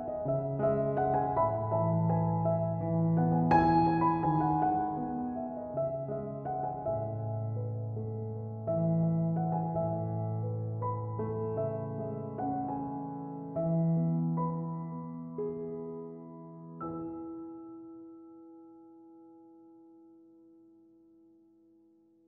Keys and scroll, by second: 3.2-3.9 typing, 14.8-15.6 typing.